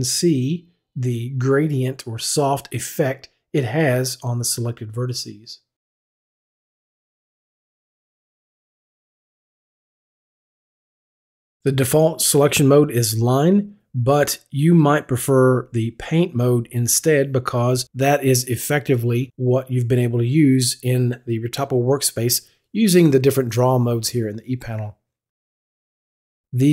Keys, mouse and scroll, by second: 7.9 click, 11.9 click, 26.4 click.